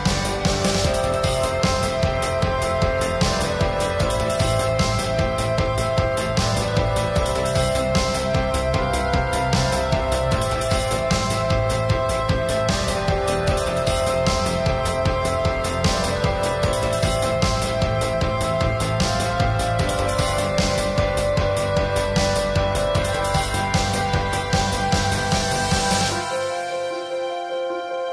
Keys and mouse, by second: 0.1-0.5 [, 1.3-1.6 middle drag, 1.7-2.3 ], 2.5-3.1 drag, 3.1 middle drag, 3.9 ctrl+s, 4.1-4.7 middle drag, 4.9 ctrl+s, 5.1 middle drag, 5.6 ctrl+s, 6.1 ctrl+s, 6.6 a, 6.7 a, 6.8 middle drag, 7.5-8.6 middle drag, 8.7-10.2 middle drag, 10.2 click, 11.0-12.1 drag, 11.4-11.9 middle drag, 11.9-13.2 right drag, 12.2 click, 13.3 ctrl+s, 13.7-14.1 drag, 14.3-17.7 drag, 17.7 ctrl+s, 17.8 click, 19.2-19.5 ], 19.9-20.3 drag, 20.3 middle click, 20.7 middle click, 21.5-22.0 middle drag, 22.2-22.8 middle drag, 22.8 click, 23.0 middle drag, 23.3 drag, 23.3-23.6 middle drag, 23.6 click, 23.7 ctrl+s, 23.9 middle click, 24.2 alt+s, 25.8 ctrl+s, 26.1 ctrl+s, 26.6 ctrl+s, 27.0 ctrl+s.